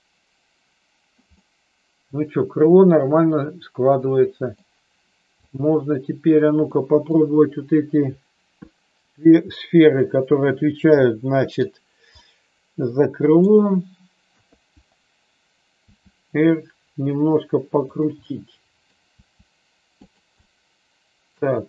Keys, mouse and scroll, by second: 1.3-4.6 middle drag, 5.4 click, 6.7 middle click, 9.0 click, 11.0 middle click, 12.2-13.4 middle drag, 14.3 KP_3, 15.9 r, 18.2-18.9 middle drag, 19.2 r, 20.1 click, 20.3-21.3 middle drag.